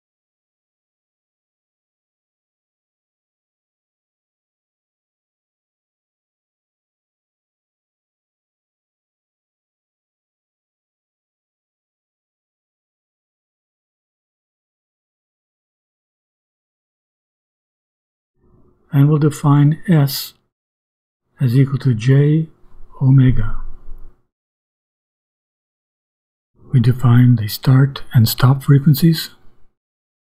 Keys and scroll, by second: 1.1 Up, 4.5 s, 6.3 2, 7.3 Right, 8.0 shift+=, 9.1 2, 9.5 space, 11.0 space, 12.5 n, 13.0 space, 13.6 s, 14.5 shift+=, 16.1 n, 17.9 2, 18.6 Right, 19.7 ;, 20.2 Return, 20.7 s, 21.2 =, 22.9 space, 24.6 ;, 25.2 Return, 26.7-30.2 typing.